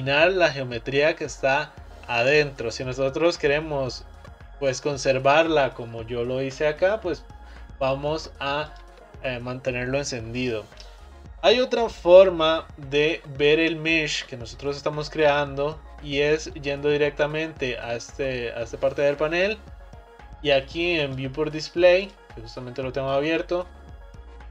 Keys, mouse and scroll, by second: 8.8 click, 16.6 click, 19.6-21.1 scroll down 7, 21.1-22.6 drag, 22.6-24.5 scroll down 9.